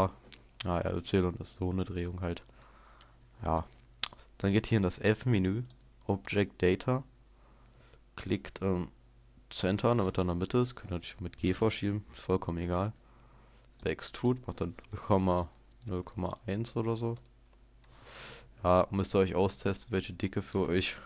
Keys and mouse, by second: 2.6-5.8 middle drag, 5.8-12.0 drag, 13.8-15.5 drag, 18.4 middle click, 18.6-21.0 middle drag.